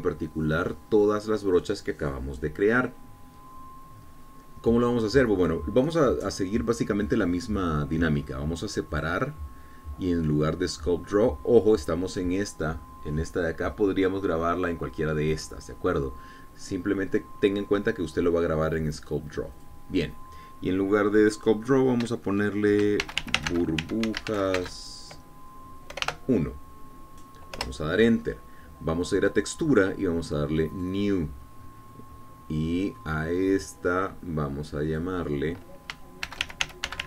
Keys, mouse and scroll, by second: 10.0 click, 20.6 click, 24.1-25.7 typing, 27.0 BackSpace, 27.1 1, 28.6 Return, 30.1 click, 31.8 click, 36.0 click.